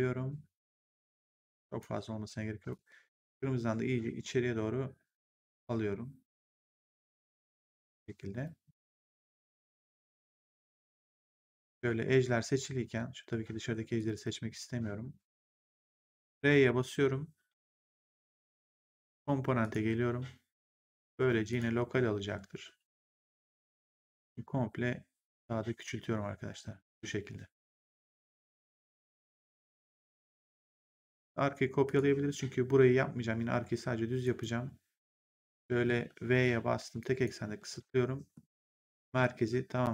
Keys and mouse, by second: 2.6 click, 10.0 right click, 11.2 right click, 13.8 click, 16.1 r, 18.4 click, 21.4 click, 23.7 click, 28.8 right click, 31.8 click, 34.1 right click, 36.0 Insert, 36.9 click, 37.5 v, 38.2 middle click.